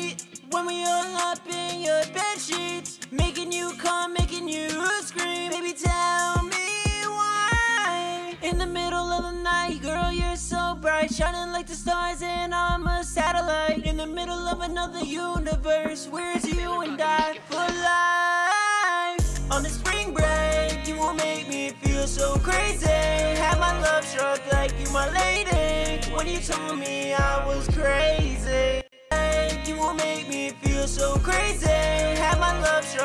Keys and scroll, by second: 4.8 ctrl+super+w, 5.0 super+s, 5.7 super+Tab, 12.8 super+Tab, 16.0 super+Tab, 20.3 super+Tab, 20.8 super+`, 32.8 F2.